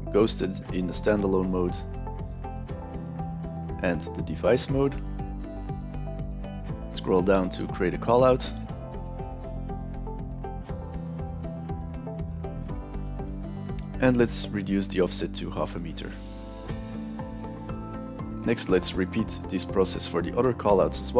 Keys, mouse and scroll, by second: 0.4 click, 1.5 click, 3.8 click, 5.4 alt+right drag, 6.0 click, 6.3 click, 8.9 alt+right click, 9.3 alt+right click, 9.8 click, 10.4 click, 11.5 e, 11.8 click, 15.0 click, 15.6 click, 17.7 alt+right click.